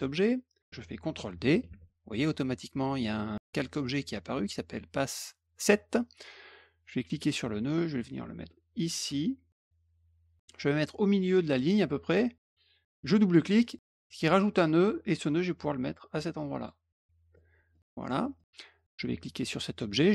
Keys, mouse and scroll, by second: 1.7 d, 7.1-9.5 drag, 13.6 click, 13.7 click, 14.9-16.6 drag, 17.3 middle click, 18.0 middle click, 18.7 click.